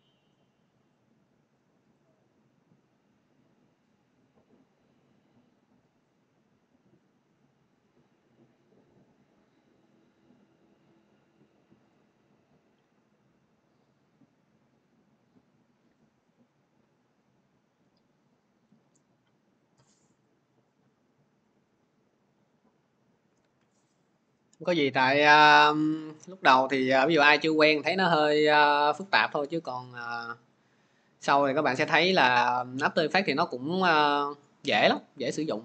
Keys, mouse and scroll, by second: 1.9-6.9 drag, 23.0 click, 23.3 alt+Tab.